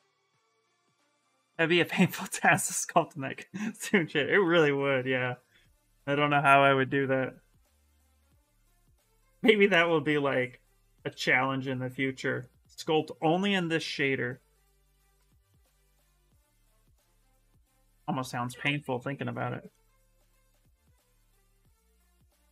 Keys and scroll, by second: 4.2 s, 15.9 s, 22.4-22.5 typing.